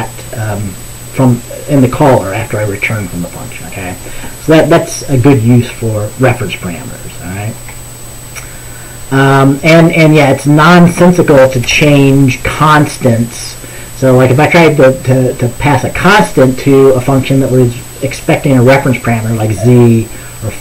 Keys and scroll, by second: 11.7 BackSpace, 11.8 BackSpace.